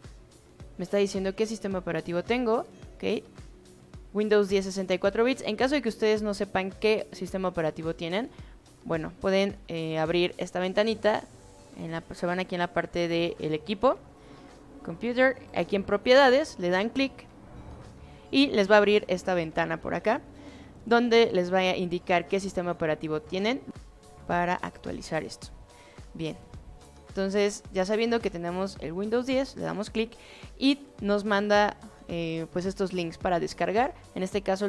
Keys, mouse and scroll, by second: 2.1 click, 7.8 click, 8.8 click, 9.8 click, 12.1 click, 14.8 click, 17.6 click, 26.4 click, 27.3 click, 29.2 click, 33.0 click.